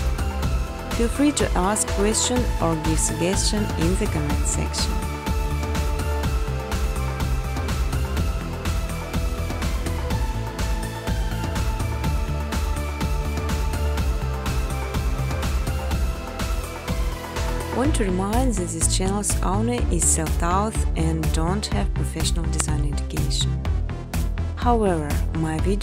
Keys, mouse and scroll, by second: 0.7 click, 2.1 click, 3.9 click, 5.6 click, 5.9 2, 6.3-12.3 Tab, 9.4 click, 10.9 click, 11.1-11.9 typing, 13.1 click, 19.1 click, 20.2 0, 21.6 Tab, 22.1 Tab, 23.2 Tab, 24.2 typing, 24.6 Tab, 24.8 Tab, 25.4 typing, 25.5 click.